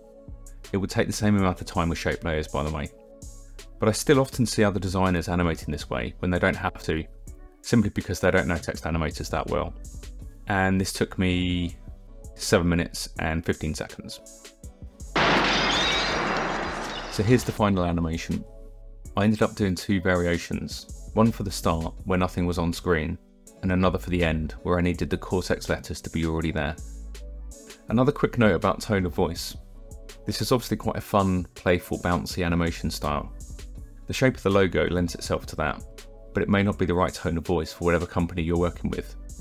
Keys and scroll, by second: 1.0 space, 1.2 space, 1.5 Return, 1.9 t, 2.1 Return, 3.3 ctrl+=, 5.4 ctrl+alt+shift+y, 6.0 shift+Down, 6.2 KP_0, 6.5 space, 6.7 m, 8.2-11.7 typing.